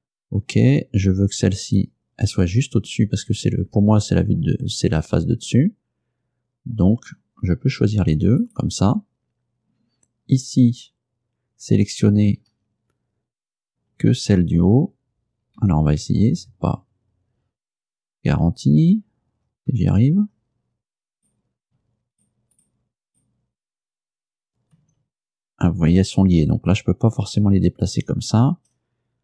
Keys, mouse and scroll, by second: 1.7 right click, 8.5 shift+right click, 8.8 shift+middle click, 12.6 a, 14.0 l, 15.7 a, 21.2 right click, 22.2 shift+right click, 22.6 shift+right click, 23.2 shift+right click, 24.8 g, 27.5 Escape.